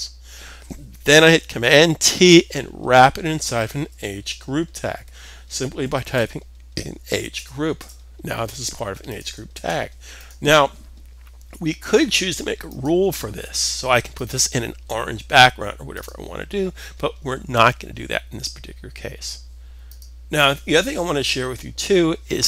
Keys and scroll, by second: 1.6 super+t, 3.3-5.5 typing, 9.1 s, 11.7 typing.